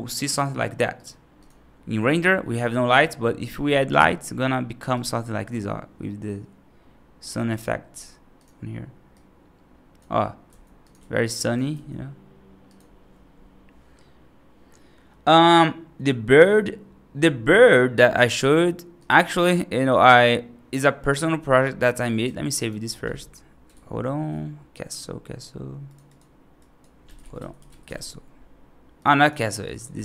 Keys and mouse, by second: 0.2 click, 0.8 right drag, 2.8 shift+a, 5.4 r, 7.8 g, 9.0 click, 10.3 r, 10.9 g, 11.6 r, 17.8 right drag, 18.8-22.1 drag, 22.4 right drag, 22.8 ctrl+s, 23.6 ctrl+s.